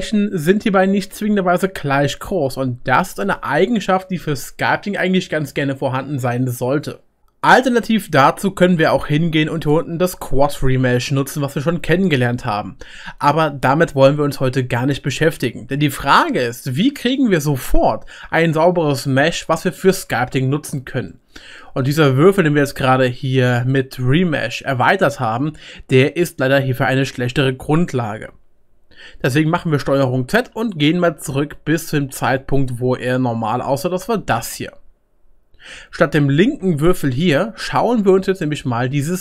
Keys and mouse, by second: 10.3 click, 10.3-11.5 middle drag, 10.3 right click, 20.1 Tab, 29.2 ctrl+z, 29.8 ctrl+z, 30.2 ctrl+z, 30.5 ctrl+z, 30.9 ctrl+z, 31.4 ctrl+z, 31.9 ctrl+z, 32.3 ctrl+z, 33.0 ctrl+z, 33.5 ctrl+z.